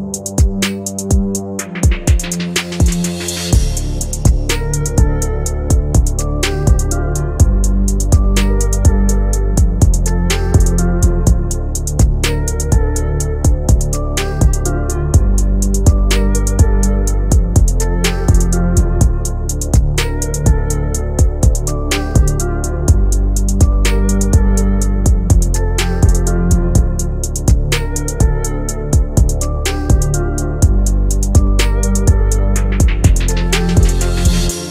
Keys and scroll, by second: 28.7 F3.